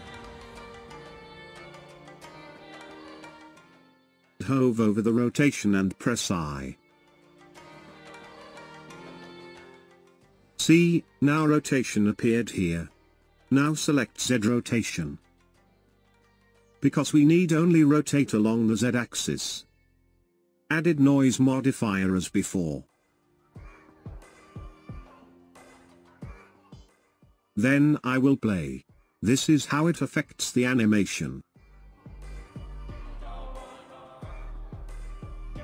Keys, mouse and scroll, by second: 15.7 click, 22.1-25.3 drag, 27.1-28.1 scroll up 3, 28.1-29.3 scroll down 3, 29.3-30.1 scroll down 2, 30.3 space.